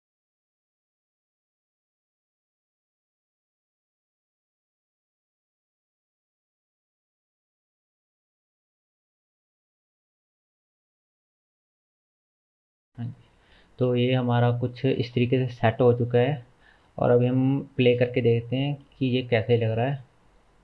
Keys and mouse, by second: 0.5 click, 1.0 click, 1.3 g, 1.7 middle click, 2.5 shift+click, 2.7 g, 3.7 shift+z, 3.9 g, 4.8 click, 5.0 g, 5.6 middle click, 5.7 g, 7.4 click, 7.6 g, 8.8 g, 9.3 g, 9.4 alt+middle click, 10.3 g, 10.4 shift+middle click, 10.8 click, 11.0 g, 11.2 alt+middle click, 12.1 click, 12.3-20.6 alt+middle drag, 12.3 g, 13.3 Tab.